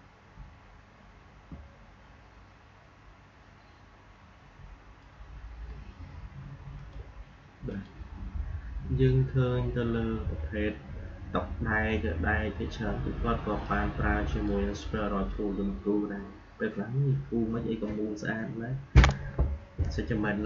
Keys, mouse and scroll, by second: 0.0-1.3 typing, 6.7 click, 13.5-16.8 drag.